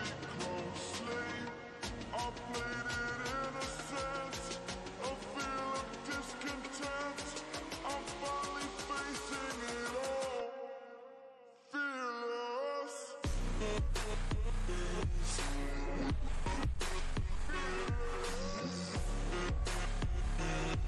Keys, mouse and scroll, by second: 1.0-1.5 drag, 1.7-2.2 click, 4.8-6.4 drag, 10.2 ctrl+space, 10.4 ctrl+click, 10.6-11.1 ctrl+space, 13.1-14.0 ctrl+space, 15.3-15.8 drag, 17.4 ctrl+space, 17.7-18.5 ctrl+click, 17.8 ctrl+space, 18.7 click, 19.0-20.6 space.